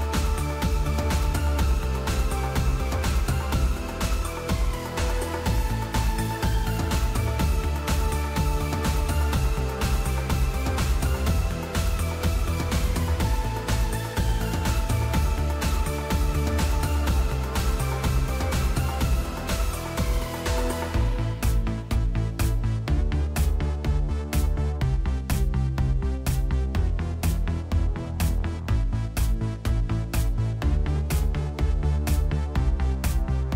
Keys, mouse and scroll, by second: 3.6 typing, 3.7 Return, 21.5-25.9 typing, 26.9-28.2 typing, 29.7-33.2 typing.